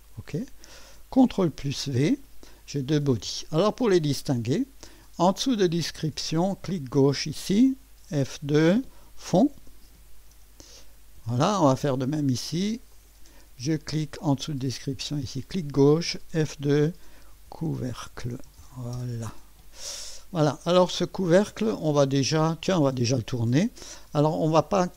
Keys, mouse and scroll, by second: 0.0 click, 1.5 ctrl+v, 6.7 click, 8.3 F2, 9.2-10.8 typing, 11.2 Return, 12.9 click, 15.3 click, 16.4 F2, 17.1-19.3 typing.